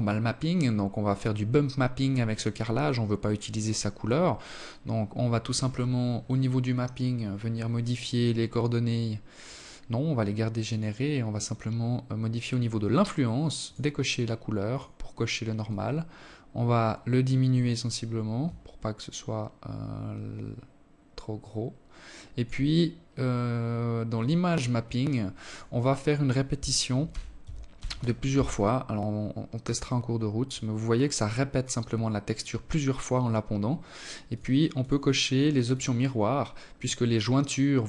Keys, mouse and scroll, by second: 2.7-4.3 scroll down 10, 9.0 click, 12.0 click, 13.1 click, 14.0 click, 21.1-22.5 scroll up 4, 22.5 click, 23.8 click, 27.4-28.7 scroll up 4, 28.7 click, 32.6 click, 33.1 click, 34.0 click, 35.1 click, 35.4 click, 37.6 click.